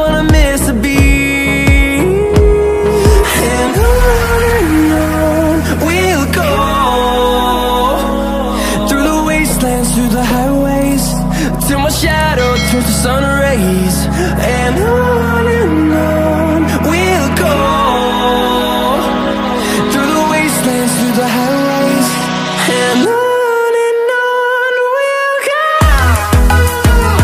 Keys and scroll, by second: 3.2 ctrl+e.